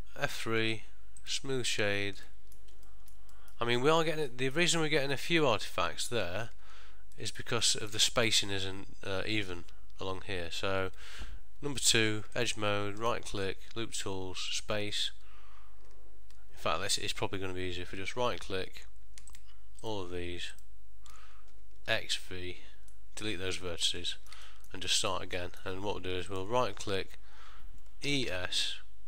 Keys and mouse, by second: 0.3 F3, 2.4 ctrl+middle click, 3.0 shift+middle click, 3.4 middle click, 3.9 ctrl+middle click, 4.4 middle click, 4.9 ctrl+middle click, 6.7 Tab, 7.2 middle click, 7.7 ctrl+middle click, 12.4 alt+click, 13.1 right click, 19.5 alt+shift+click, 19.9 alt+shift+click, 22.0 x, 23.0 middle click, 24.2 ctrl+middle click, 24.6 shift+middle click, 25.0 middle click, 25.5 ctrl+middle click, 26.4 alt+click, 28.2 e.